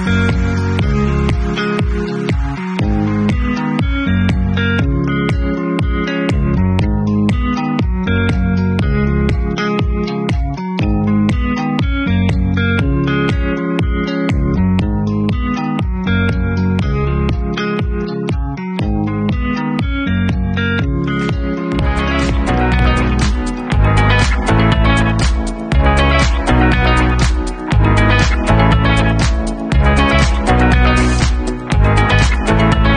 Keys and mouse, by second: 6.0-8.0 drag, 8.0-9.0 middle drag, 9.0 click, 9.1 middle click, 10.0-17.2 drag, 16.6 ctrl+s, 17.2-25.0 middle drag, 25.0-26.0 drag, 26.0-29.1 middle drag, 29.1-32.9 drag.